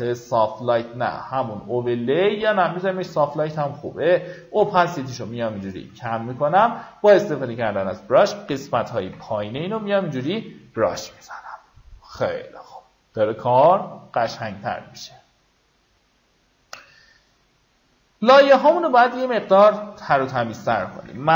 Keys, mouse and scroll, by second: 8.7 x, 9.0-10.2 drag, 12.2-12.5 alt+scroll up 1, 12.8-13.8 alt+scroll up 1, 18.3 click, 21.0-21.3 typing.